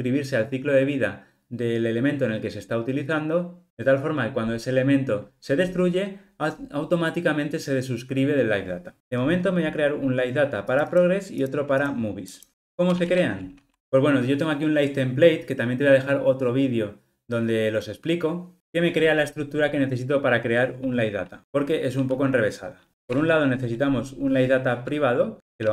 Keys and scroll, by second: 23.2 Return.